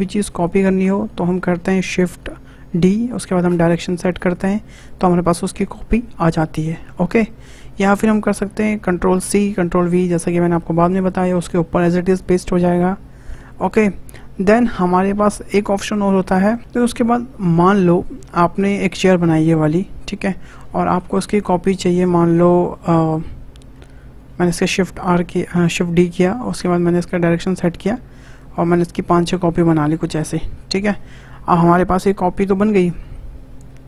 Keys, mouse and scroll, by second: 0.4 click, 1.0 middle click, 2.0 shift+d, 5.6-7.6 middle drag, 7.6 Delete, 8.1 click, 9.3 ctrl+c, 9.6 ctrl+v, 10.1 middle click, 11.0 click, 14.3 Delete, 20.5 scroll down 1, 20.8-21.6 shift+middle drag, 21.6 click, 25.0 shift+d, 28.9 shift+r, 29.2 shift+r, 29.3 shift+r, 29.8-30.2 scroll down 5, 30.2-31.0 shift+middle drag, 31.0-33.3 scroll up 2, 33.3-33.6 scroll up 3.